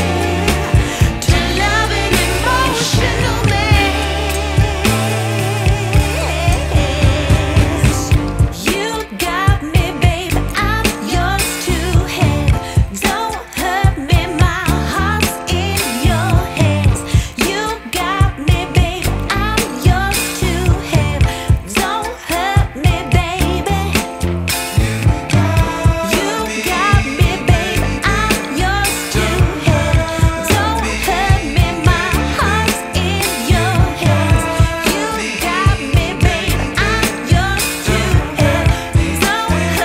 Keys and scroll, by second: 3.9 alt+shift+Return, 4.5 shift+Return, 4.8 space, 5.8 z, 8.5 space, 9.6 v, 12.7 shift+super+g, 34.5 space, 35.9 b.